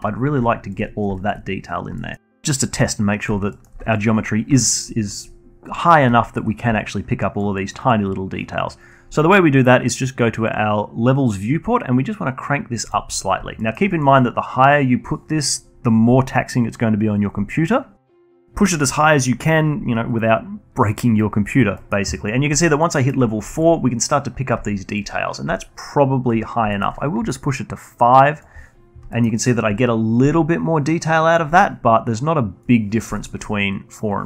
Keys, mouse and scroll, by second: 0.4-1.4 alt+drag, 1.4-2.6 scroll down 3, 1.9-2.4 alt+middle drag, 2.6-2.9 alt+middle drag, 2.9 alt+click, 3.4-5.2 alt+middle drag, 5.2-8.9 alt+drag, 8.9 alt+middle drag, 9.1 alt+click, 10.0-12.5 scroll up 2, 12.5-13.0 scroll up 3, 14.2 click, 14.9 alt+middle click, 15.2-18.4 alt+drag, 19.4 scroll up 2, 19.7-23.7 alt+drag, 25.2-25.5 alt+middle drag, 25.5-26.4 alt+drag, 26.4-26.7 alt+middle drag, 26.7 scroll up 2, 27.0-27.7 alt+drag, 27.7-28.1 scroll down 1, 28.1-28.7 alt+drag, 28.7 scroll down 1, 29.0-29.9 alt+drag, 29.9 scroll up 1, 30.1-31.8 alt+middle drag, 31.8 click, 32.6 alt+middle drag, 32.8-34.2 alt+drag.